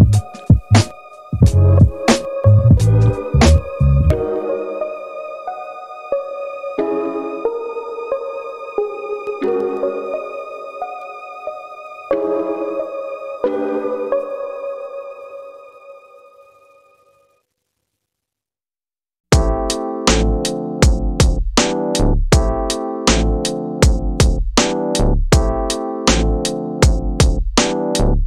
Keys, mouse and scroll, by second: 1.8 click, 3.9 click, 4.7 click, 8.0 middle click, 9.0-10.9 ctrl+drag, 17.4 middle click, 20.0 click, 25.1 click, 26.1 click, 27.4 click, 27.6 click.